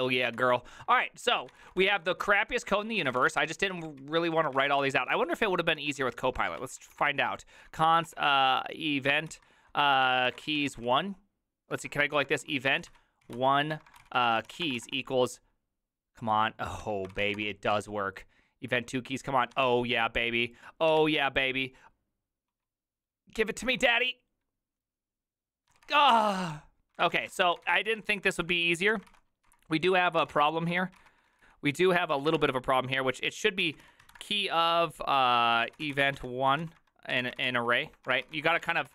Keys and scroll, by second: 0.4 alt+{, 1.3-15.3 typing, 2.3 ctrl+d, 3.9 ctrl+u, 16.6-17.8 typing, 19.6 Tab, 19.7 Return, 20.9 Tab, 21.0 Return, 23.7 Tab, 23.8 Return, 25.7 Tab, 25.9 Return, 26.8-38.9 typing.